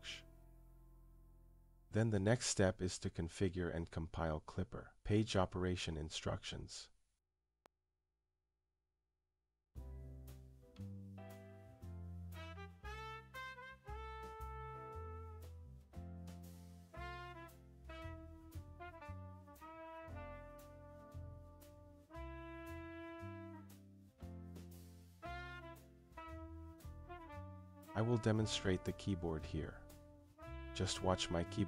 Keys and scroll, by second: 28.1-29.2 typing, 29.7 Return, 30.6-31.6 typing.